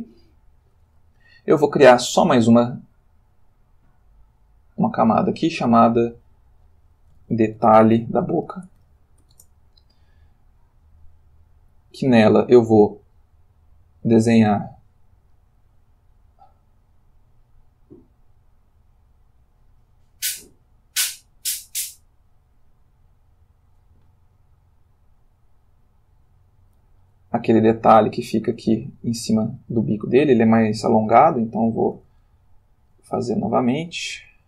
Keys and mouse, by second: 5.0 click, 5.8 click, 7.2-9.2 typing, 9.3 shift+Return, 13.7 click, 14.5 click, 15.3 click, 18.6-27.0 drag, 27.7 ctrl+click, 29.0 ctrl+shift+click, 29.2 shift+middle click, 31.2 ctrl+z, 32.3 ctrl+shift+middle click, 33.3-34.4 ctrl+shift+middle drag.